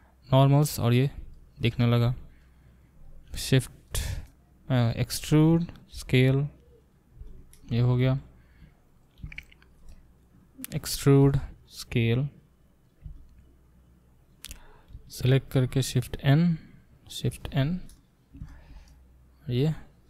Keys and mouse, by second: 2.4 click, 2.6 middle click, 2.6 click, 3.3-20.0 shift+middle drag, 5.1 e, 8.9 click, 9.0 click, 10.8 e, 14.9 a, 17.5 shift+n.